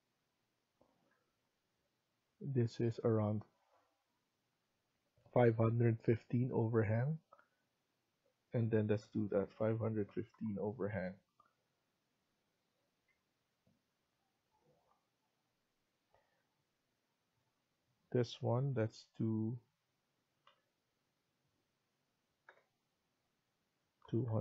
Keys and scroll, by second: 0.8 Escape, 1.0 Escape, 1.2-1.9 typing, 5.6 Escape, 9.0 5, 10.1-11.0 typing, 11.0 Escape, 12.7 Escape, 13.0 Escape, 14.7 typing, 19.0 BackSpace, 20.4 typing, 22.4 BackSpace, 23.7-24.4 typing.